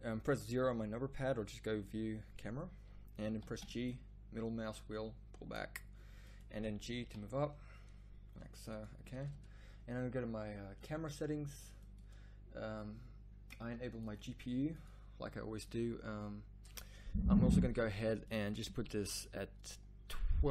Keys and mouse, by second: 3.4 g, 6.5 g, 13.7-14.7 middle drag.